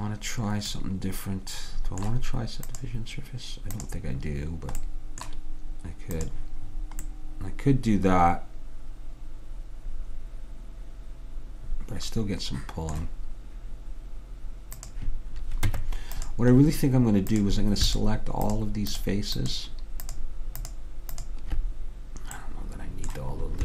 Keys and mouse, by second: 0.8-2.8 middle drag, 2.8-4.7 drag, 4.9 middle click, 6.3-8.2 drag, 8.2 middle click, 8.3 middle click, 14.8-16.6 drag, 15.8 Tab, 17.4-22.9 drag, 22.5 middle click.